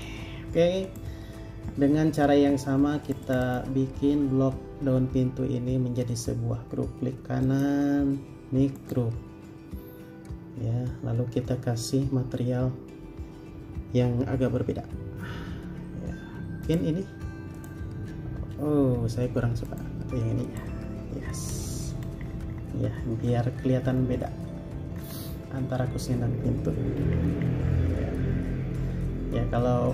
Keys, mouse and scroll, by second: 3.4 double click, 7.6 right click, 22.0 space, 22.2 scroll up 1, 24.1 scroll down 1, 26.6 scroll up 1.